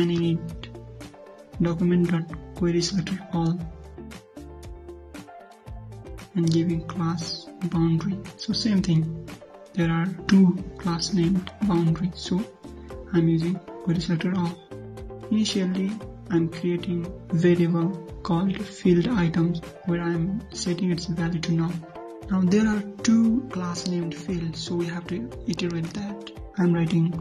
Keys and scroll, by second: 10.2 ctrl+c, 13.3 ctrl+v, 24.8 ctrl+c, 26.0 ctrl+v.